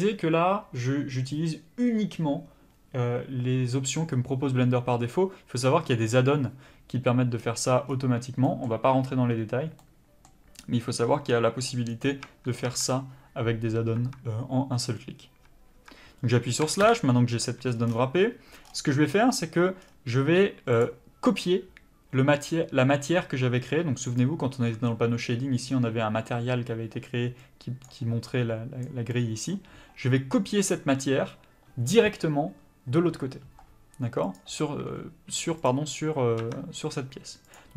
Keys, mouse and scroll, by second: 9.8 middle click, 12.2 Tab, 16.9 KP_Divide, 17.7 scroll up 1, 17.9-18.6 scroll down 1, 18.6-19.1 scroll up 1, 19.1-20.4 scroll down 1, 20.8 click, 34.3 click, 35.6 click, 36.5 Tab, 37.5 click.